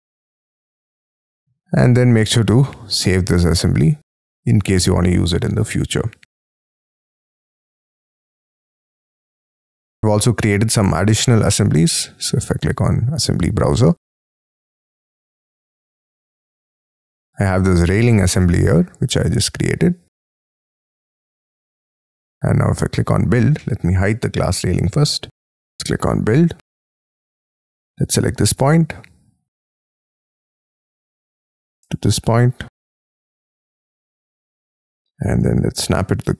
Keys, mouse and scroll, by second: 4.8-5.5 scroll down 9, 5.6-7.1 scroll up 11, 16.2 scroll down 3, 23.6 middle click, 24.8 F2, 25.8-28.3 scroll up 22, 28.3-29.8 scroll down 21, 29.8-33.5 scroll up 18, 33.5 scroll up 2, 33.9 middle click, 35.5 Right, 35.9 Left.